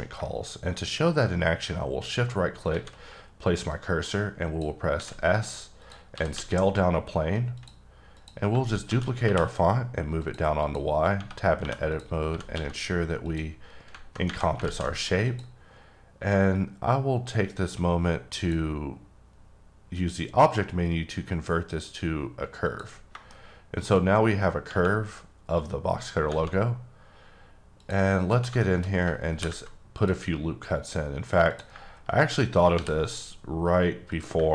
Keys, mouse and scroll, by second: 1.1 shift+right click, 2.7 shift+a, 3.7 click, 5.0 s, 5.8 click, 6.3 x, 7.5 click, 8.1 click, 8.9 shift+d, 9.2 y, 10.2 click, 10.6 click, 11.6 2, 11.9 click, 12.3 g, 12.5 x, 13.2 click, 14.6 alt+z, 15.2 click, 16.0-18.3 scroll up 2, 18.4 click, 22.6 click, 23.3 middle click, 26.1 scroll down 1, 26.9-27.8 scroll up 1, 27.8 click, 28.6 shift+middle click, 28.8 shift+scroll up 2, 29.3 ctrl+r, 29.4 ctrl+t, 30.0 click, 31.5 click, 32.7 ctrl+r, 33.0 click, 34.1 click.